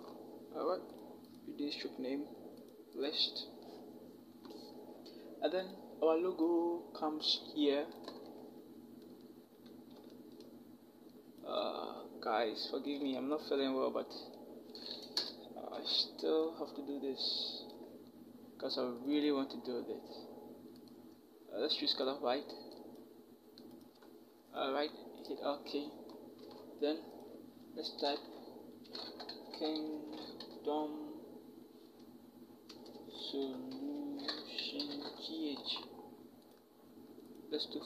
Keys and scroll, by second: 15.0 Return, 15.5 v, 26.3 t, 28.6-30.2 typing, 32.5 Return, 32.7-34.9 typing.